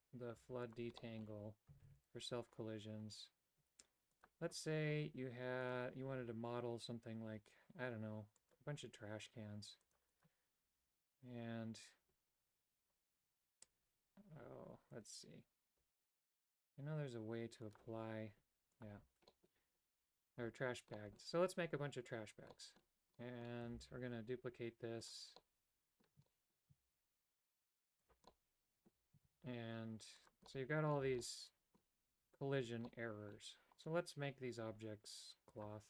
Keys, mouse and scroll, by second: 0.3 x, 1.0 middle click, 1.8 shift+a, 5.6-8.5 drag, 9.8 click, 10.1 click, 17.7-18.8 drag, 19.3 middle click, 20.0 Tab, 20.4 Tab, 20.9 middle click, 22.5 middle click, 23.1 middle click, 23.7 shift+d, 25.3 middle click, 26.3 shift+middle click, 26.8 shift+d, 28.3 middle click, 30.5 middle click, 30.5 shift+d, 31.0 a, 31.2 middle click, 32.8 middle click, 35.6 click.